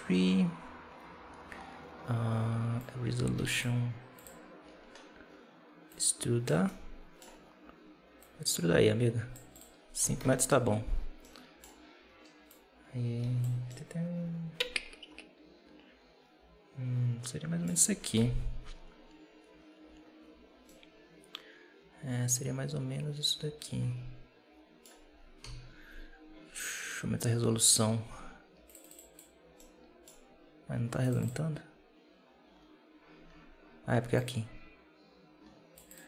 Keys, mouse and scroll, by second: 2.7 click, 4.0 click, 4.5-5.8 scroll down 4, 5.8 click, 6.5 middle click, 7.3-7.8 scroll up 1, 8.1-11.1 drag, 11.1-12.4 middle drag, 12.4 click, 13.6-16.6 middle drag, 18.0 KP_7, 20.5-23.6 middle drag, 25.3 KP_7, 28.5 click, 29.5-30.9 middle drag, 30.9-33.0 drag, 33.0-34.0 scroll up 7, 34.0-36.0 drag.